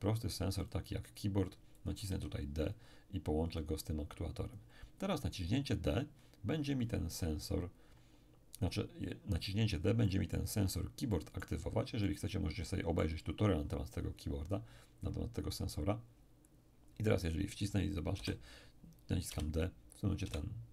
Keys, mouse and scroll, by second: 1.7-5.5 drag, 2.1 d, 10.0 middle click, 10.6-11.1 scroll up 1, 11.1-13.9 middle drag, 18.1 p, 20.2 d.